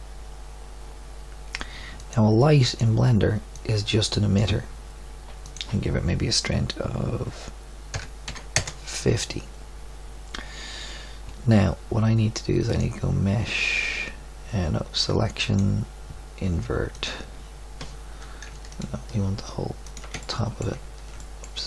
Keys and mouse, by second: 21.1-21.6 middle drag.